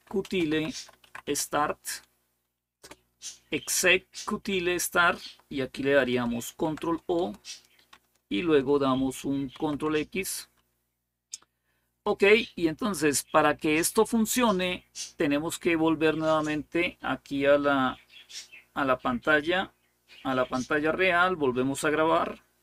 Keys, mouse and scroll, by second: 0.0-3.1 typing, 6.3 ctrl+o, 7.0 Return, 9.3 ctrl+x.